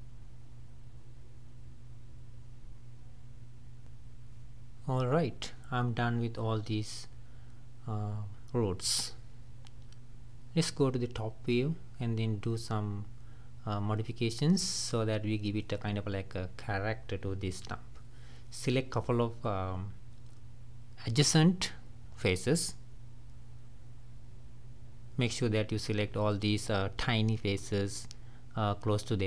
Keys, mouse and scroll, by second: 0.0-2.3 typing, 1.2 middle click, 2.8 middle click, 3.0 scroll up 1, 3.2 scroll down 1, 3.3-4.5 middle drag, 4.5 g, 6.9 click, 7.2 middle click, 8.2-8.5 scroll down 2, 8.5 middle click, 9.0 scroll up 3, 9.2 middle click, 9.7-10.9 scroll down 1, 10.9 shift+middle click, 11.4 scroll up 2, 11.6-13.8 middle drag, 13.8 click, 16.0 click, 16.7 shift+click, 19.2 scroll down 1, 19.7-20.6 scroll up 3, 21.2-21.7 scroll down 2, 23.0 click, 24.0 shift+click, 24.5 shift+click, 25.0 shift+click, 25.6 shift+click, 26.0 shift+click, 26.4 shift+click, 26.9 shift+click, 27.3 shift+click, 27.8 scroll up 2.